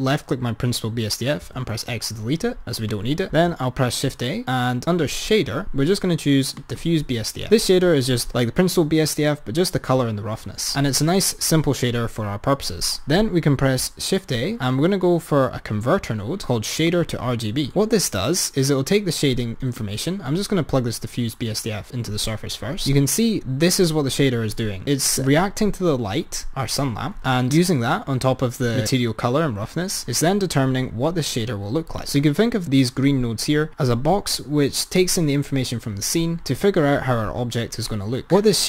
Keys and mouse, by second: 1.9 x, 3.2 click, 10.6 click, 13.7 shift+a, 20.0 click, 32.0 click.